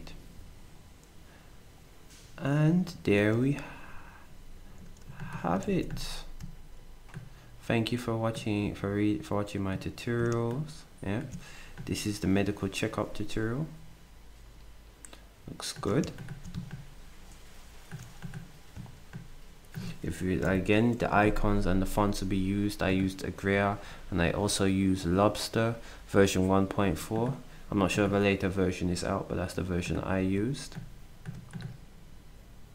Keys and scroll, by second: 5.6 ctrl+shift+d, 20.5 ctrl+alt+shift+Down.